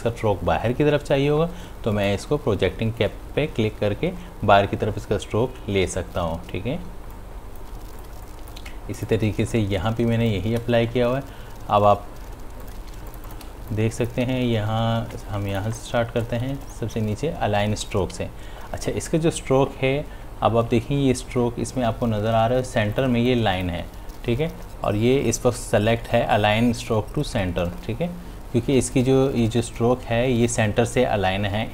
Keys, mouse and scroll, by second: 2.2 click, 7.0 space, 9.0 click, 9.4 space, 13.5 ctrl+alt+space, 15.9 click, 23.7-24.7 drag, 24.7 space.